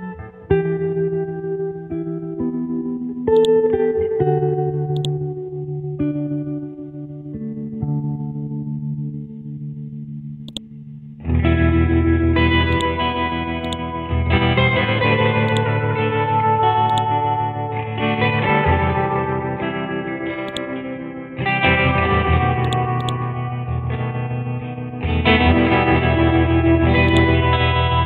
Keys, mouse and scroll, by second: 2.0-3.4 scroll up 1, 3.4-6.1 drag, 7.3 Left, 7.5-8.0 typing, 8.5-9.2 scroll down 1, 9.2-10.5 scroll up 1, 10.5-18.3 drag, 18.9-20.5 scroll down 1, 20.5 click, 22.4 click, 23.4-25.8 scroll down 1, 25.8-26.4 scroll up 1, 27.1 click.